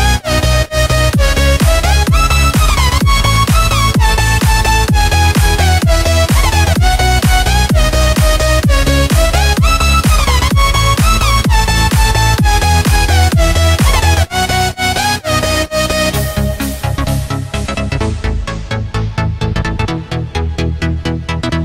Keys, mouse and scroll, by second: 0.0-3.5 typing, 4.2 click, 6.9 click, 7.5 right click, 8.5 click, 9.1 click, 9.8-11.0 typing, 11.9 click, 12.3 right click, 13.2 Tab, 13.2 F10, 14.2-17.3 drag, 17.9 typing, 18.3 Return, 19.3 click, 21.3-21.6 typing.